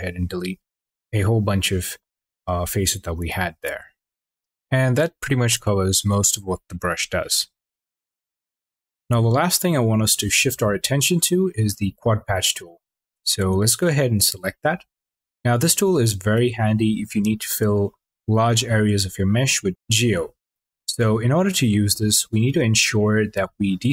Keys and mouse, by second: 12.5 q, 17.7 middle click, 17.9 click, 20.0 middle click.